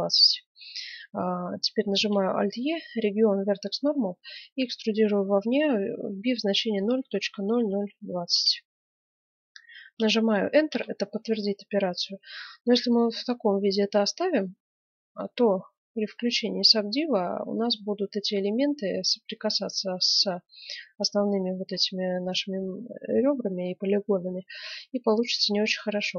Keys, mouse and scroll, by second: 1.9 alt+e, 12.4-15.8 middle drag, 16.0-18.0 drag, 18.0 middle click, 21.1-23.4 middle drag.